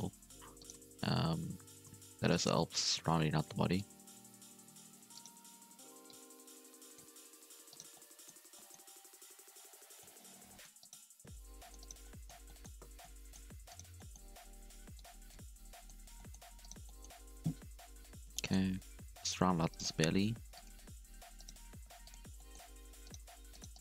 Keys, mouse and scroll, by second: 0.0-0.5 scroll up 1, 0.5 alt+shift+right click, 1.6 alt+a, 2.9 c, 6.0-7.3 drag, 7.3 alt+a, 7.6 alt+shift+right click, 7.9-9.7 middle drag, 9.7 c, 11.2 c, 11.9 scroll down 1, 12.0 middle click, 12.8 c, 14.0 middle click, 14.9 click, 15.5 middle click, 16.0 alt+a, 16.1 middle click, 16.5 scroll up 1, 16.6 right click, 16.8 middle click, 17.2-17.8 scroll up 2, 17.8 KP_3, 18.3 shift+middle click, 18.5 scroll up 3, 18.8 g, 19.7 right click, 19.9 g, 21.4 right click, 21.5 g, 22.4 shift+middle click, 23.0 right click, 23.2 g, 23.7 right click.